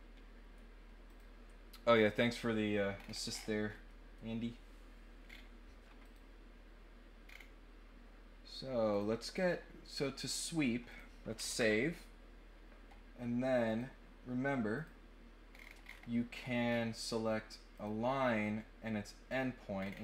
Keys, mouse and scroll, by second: 1.0 click, 2.9 scroll down 2, 3.3-3.7 scroll up 2, 3.8 middle click, 5.2 scroll up 1, 6.0 click, 7.2 scroll down 2, 8.8 click, 9.4 scroll up 2, 10.8 click, 13.6 click, 14.7 click, 15.5 middle click, 15.5 scroll down 2, 15.8-16.7 scroll up 8, 17.7 click, 18.0 middle click, 18.0-18.4 scroll up 1, 19.2 click, 19.7 middle click, 19.7 scroll down 1.